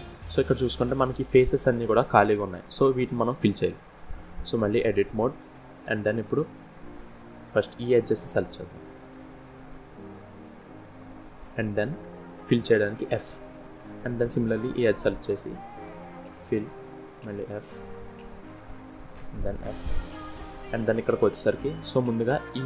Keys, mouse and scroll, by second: 2.9 middle click, 3.9 scroll up 1, 4.3 Tab, 4.9 middle click, 8.0 click, 8.9 shift+click, 9.6 click, 10.5 click, 11.0 click, 11.9 scroll down 1, 12.6 f, 13.2 middle click, 14.1 click, 15.5 f, 16.9 f, 17.7 shift+middle click, 18.3 middle click, 19.0 scroll up 1, 19.1 f, 19.8 scroll up 1, 20.4 middle click, 21.9 click.